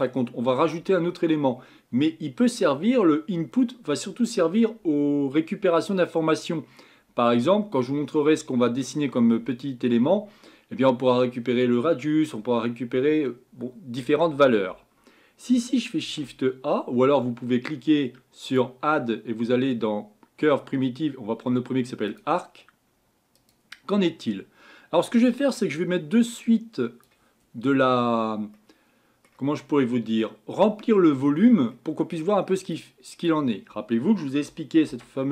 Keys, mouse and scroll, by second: 27.0 click, 27.7-28.3 scroll up 7, 28.7-35.3 middle drag.